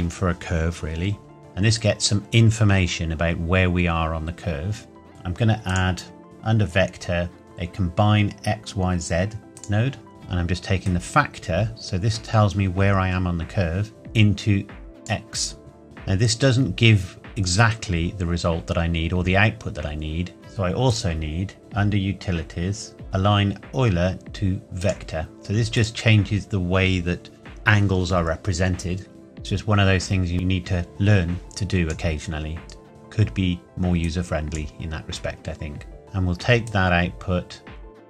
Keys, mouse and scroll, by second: 1.4-2.5 scroll up 1, 5.1 click, 9.5 click, 20.8 click, 24.8 click, 29.1-34.6 drag, 36.6-38.0 drag.